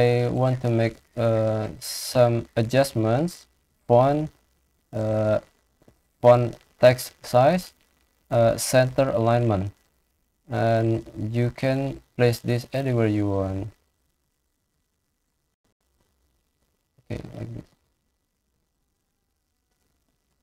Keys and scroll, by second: 8.2 ctrl+e.